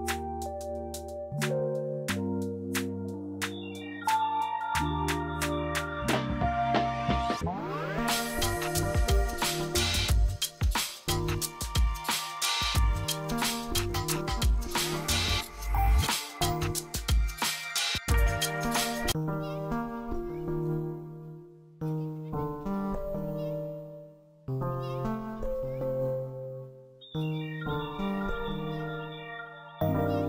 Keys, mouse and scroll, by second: 5.1 right click, 5.8 click, 12.3 F3, 13.2-19.3 drag, 19.3 shift+Page_Up, 21.0-26.9 drag, 26.9 scroll down 1, 28.2-30.0 drag.